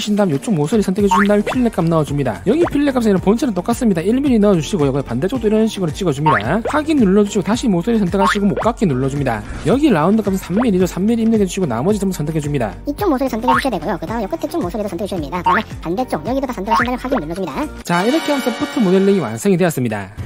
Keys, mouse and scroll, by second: 0.5 scroll down 1, 0.8 scroll up 1, 1.5 click, 2.3 click, 4.9 1, 5.3 scroll up 1, 5.7 middle click, 6.7 click, 7.3 middle click, 8.6 click, 12.2 3, 13.1 scroll up 1, 13.7 click, 14.0 scroll up 2, 14.3 shift+middle click, 14.8 middle click, 15.1 middle click, 15.6 click, 15.9 shift+middle click, 16.4 middle click, 17.0 click, 17.7 click, 19.7 click.